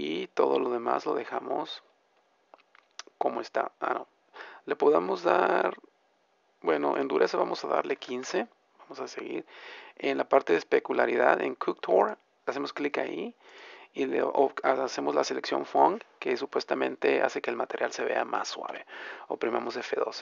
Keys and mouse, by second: 12.0-14.2 drag.